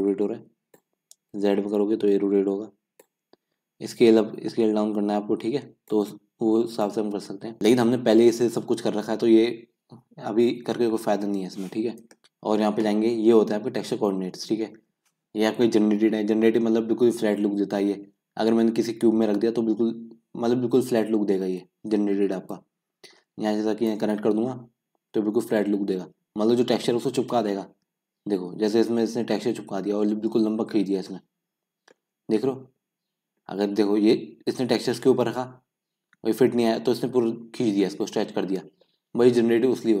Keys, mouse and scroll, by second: 7.6 scroll up 2, 7.7-25.0 middle drag, 25.0-25.5 scroll down 2, 25.5-27.2 scroll up 1, 27.2-28.0 scroll up 1, 28.0 scroll down 1, 28.2 scroll up 1, 28.4-30.9 middle drag, 30.9 scroll down 1, 31.1-32.1 middle drag, 32.1-32.8 scroll up 3, 32.8-33.6 scroll up 1, 33.6-38.1 scroll down 2, 38.1-39.6 scroll down 1, 39.6-40.0 scroll down 1.